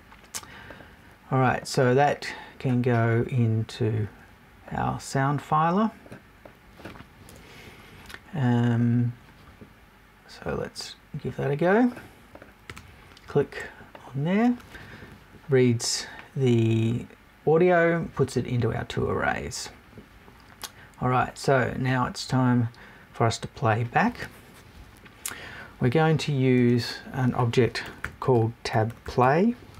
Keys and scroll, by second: 7.2 BackSpace.